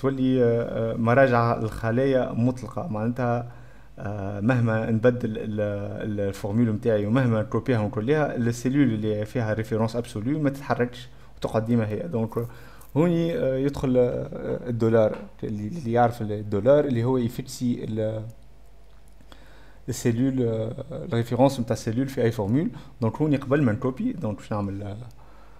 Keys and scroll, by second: 23.5-24.9 typing.